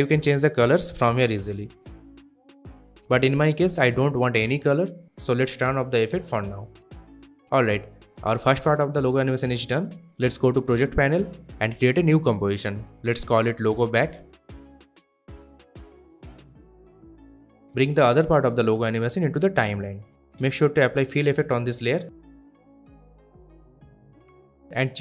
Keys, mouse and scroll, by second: 9.7 click, 13.1-15.3 typing, 16.3 Return, 17.6 click, 21.0 click, 21.5-22.7 typing, 23.4 click.